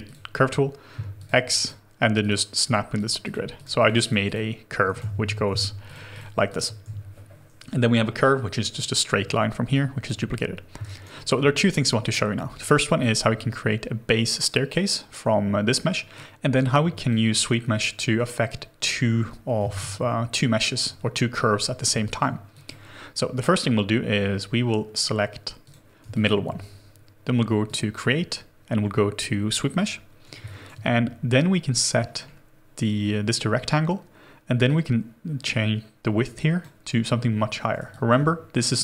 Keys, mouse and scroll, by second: 0.4 c, 1.6 click, 2.6 x, 2.9 click, 3.2 x, 3.5 click, 4.9 ctrl+z, 5.5 x, 6.4 click, 6.8 w, 6.8 x, 7.9 Delete, 9.7 alt+click, 10.8 alt+right click, 11.1 alt+middle click, 16.9 shift+click, 19.6 space, 20.3 scroll down 1, 22.0 alt+click, 26.1 alt+click, 30.4 alt+click, 31.3-34.2 scroll up 1, 37.9 alt+click.